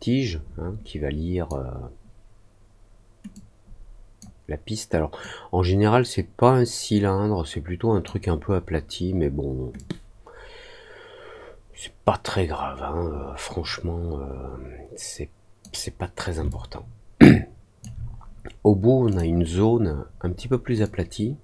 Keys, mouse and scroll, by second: 3.3 click, 5.1-8.0 drag, 9.7-15.5 drag, 16.4-17.7 alt+drag, 19.0 click, 20.8-21.4 drag.